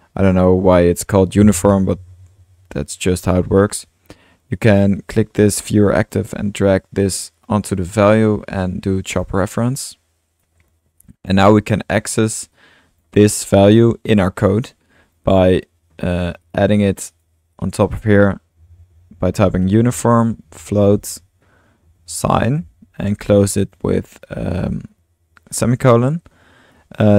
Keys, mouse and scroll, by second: 4.5-7.6 drag, 8.2-11.8 drag, 12.5-13.8 drag, 13.6-14.4 typing, 14.6-15.2 drag, 15.9-16.3 middle drag, 16.4 click, 16.8-23.1 typing, 17.1 click, 17.5 click, 25.8-26.7 drag.